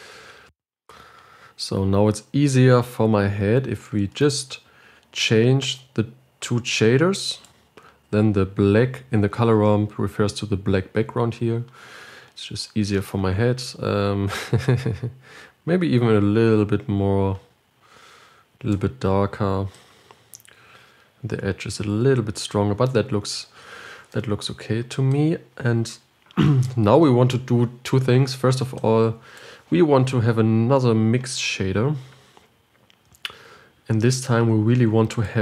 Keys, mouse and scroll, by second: 0.0 click, 0.8 click, 6.8-8.1 drag, 15.2 click, 20.1-23.2 drag, 23.2-24.4 scroll down 6, 25.4-33.7 drag, 33.7 shift+d.